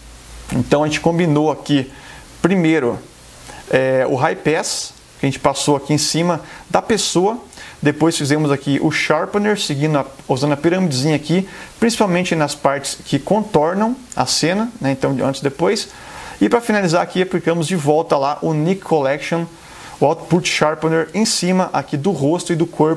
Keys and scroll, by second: 20.3 space, 22.0 super+=.